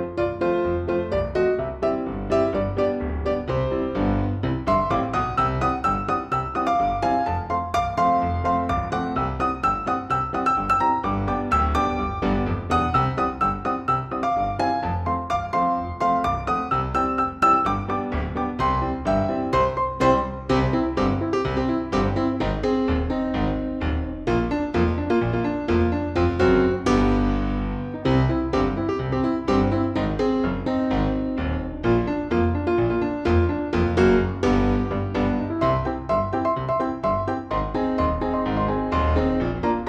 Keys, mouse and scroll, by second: 1.5 click, 6.1 click, 9.1 click, 12.6 click, 13.8 click, 14.5 shift+click, 15.7 shift+click, 16.7 Delete, 18.5 click, 20.0-23.4 drag, 25.0 click, 28.5 click, 31.6 click, 33.3-34.4 drag, 37.7-39.0 drag.